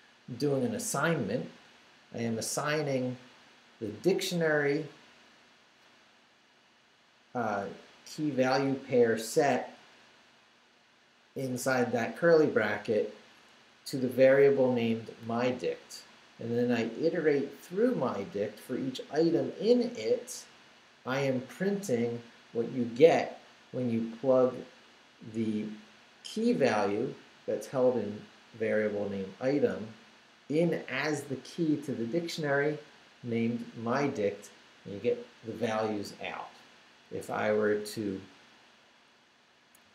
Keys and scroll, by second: 37.1 Up, 37.8 Right, 39.8 Right.